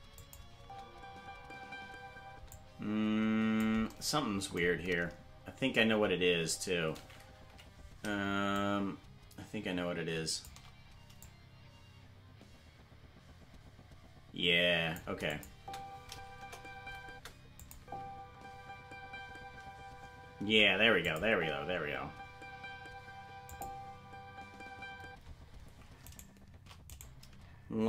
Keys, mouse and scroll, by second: 0.1 click, 0.5 space, 2.5-3.6 drag, 2.5 space, 4.6-5.3 scroll down 7, 5.9-7.1 scroll up 2, 7.5 Left, 8.5-10.4 shift+drag, 11.2-14.9 drag, 15.2 click, 15.5 space, 16.3 KP_0, 17.0 space, 17.5 click, 17.7 space, 21.0 click, 21.0 space, 21.2 space, 23.5 click, 25.0 space, 26.1 right click.